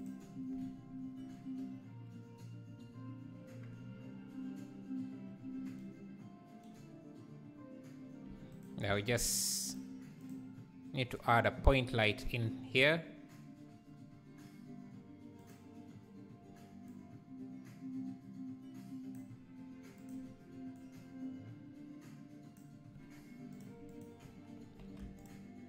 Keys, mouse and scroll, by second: 3.2 click, 3.4 scroll down 1, 8.5 shift+right click, 8.8 shift+a, 17.0-20.7 drag, 25.2 click.